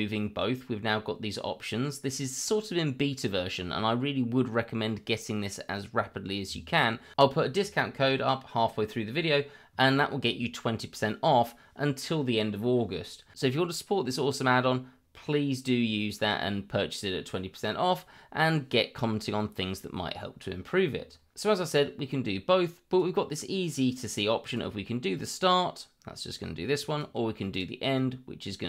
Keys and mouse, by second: 22.1 click, 24.4 click, 25.1-27.0 drag, 27.5 click, 27.9-28.6 drag.